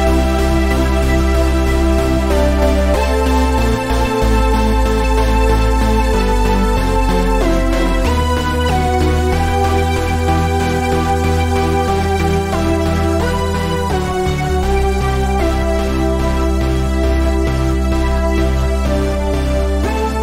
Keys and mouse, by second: 0.4 middle drag, 1.4 KP_1, 2.9 right click, 3.7-4.5 drag, 6.4 drag, 7.0 a, 10.0 right click, 10.8-12.3 drag, 10.8-12.3 right drag, 13.2-14.1 middle drag, 15.0 ctrl+z, 16.8 ctrl+z, 16.8-18.4 middle drag.